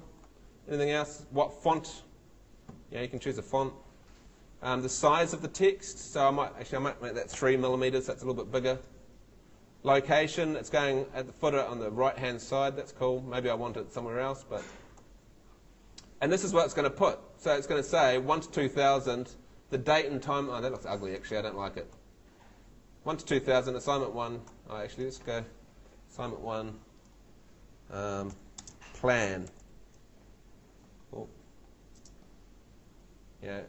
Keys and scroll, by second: 7.3 3, 28.3-30.1 typing, 32.0 space.